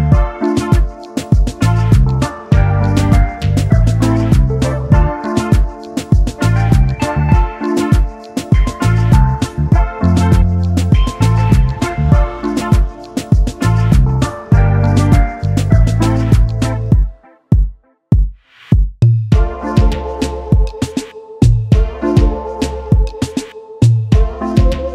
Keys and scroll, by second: 15.6 space, 16.9 space, 17.4 ctrl+s, 19.5 ctrl+c, 20.4 ctrl+v, 20.4 ctrl+z.